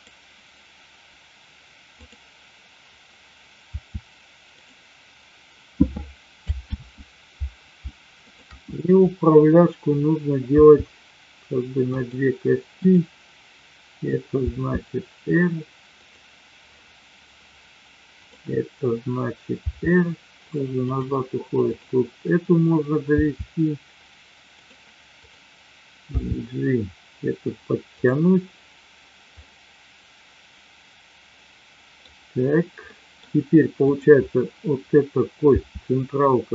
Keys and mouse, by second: 3.7 r, 4.5 click, 6.9 ctrl+z, 10.6 r, 14.3 r, 19.7 r, 21.6-22.6 drag, 23.1 r, 25.2-26.2 drag, 26.3 g, 29.3-32.0 middle drag, 32.9 middle click, 33.7 click, 35.3 r.